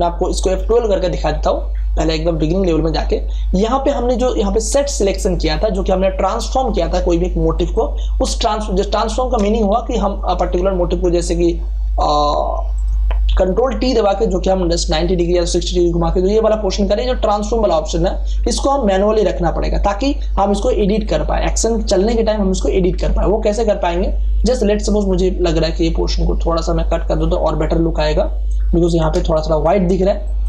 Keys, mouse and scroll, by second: 0.5 F12, 4.9 click, 7.5 click, 9.4 space, 9.7 ctrl+click, 13.3 ctrl+t, 14.0-20.9 shift+drag, 23.6 m, 25.1-29.1 drag, 29.1 space, 29.3 ctrl+click.